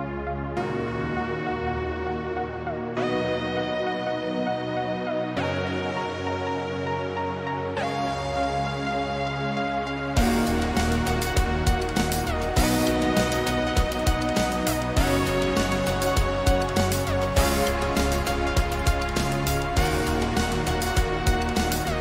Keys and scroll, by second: 1.0-2.8 typing.